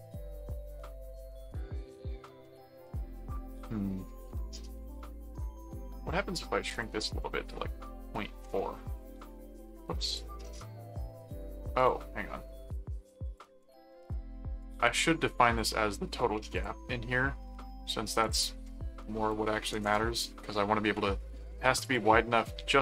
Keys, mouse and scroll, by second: 0.3-1.5 middle drag, 2.4-4.6 middle drag, 5.5 click, 6.7 click, 10.0 click, 11.3 click, 13.0 click, 14.6 right click, 15.5 click, 16.5 click, 18.2 click, 21.8 click.